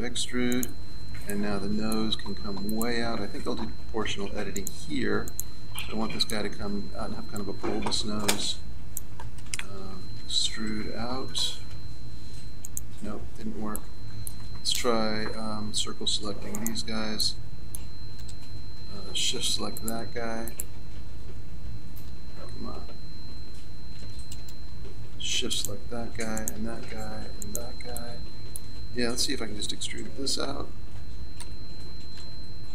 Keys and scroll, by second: 10.2 e, 13.4 ctrl+z, 15.8 c, 23.9 c, 32.2 e.